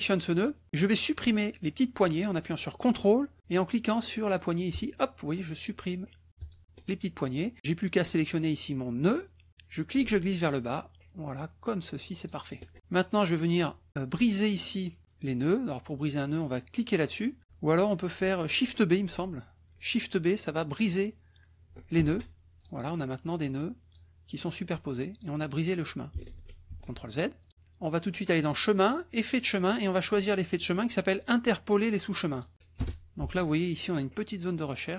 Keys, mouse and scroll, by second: 4.7 ctrl+click, 6.4 ctrl+click, 9.0-12.4 drag, 12.8 click, 22.0 shift+b, 22.6 shift+click, 23.4 click, 24.7 click, 26.2 ctrl+z, 27.4 ctrl+click, 28.4 click, 29.4 click, 30.5 click, 32.8 BackSpace, 34.8 click.